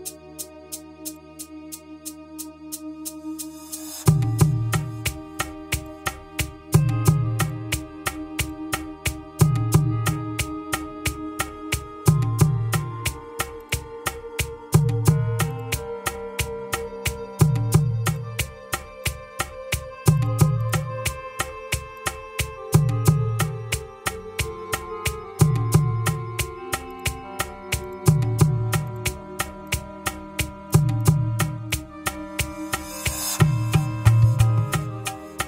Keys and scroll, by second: 23.8 Return, 33.3 Return.